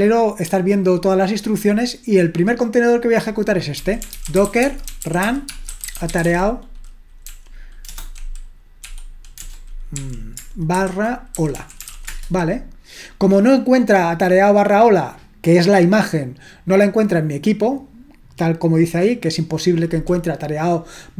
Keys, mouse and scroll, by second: 0.9-2.2 scroll down 1, 2.2-3.1 scroll down 1, 3.1 click, 3.6-12.4 typing.